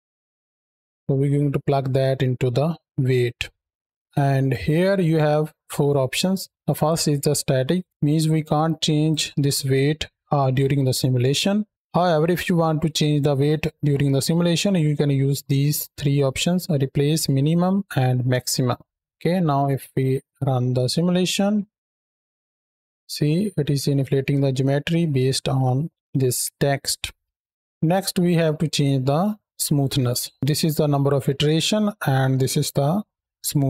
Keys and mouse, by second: 0.0 KP_7, 0.6 drag, 0.7 x, 1.1-3.0 drag, 3.3-3.9 middle drag, 4.3-7.6 drag, 8.2 click, 8.5 click, 13.3-18.9 drag, 19.8 shift+Right, 19.8 shift+Left, 21.3-21.8 drag, 21.9 space, 22.1 click, 22.4-23.4 drag, 24.5-24.8 shift+middle drag, 25.1-25.8 middle drag, 26.9 space, 27.5 space.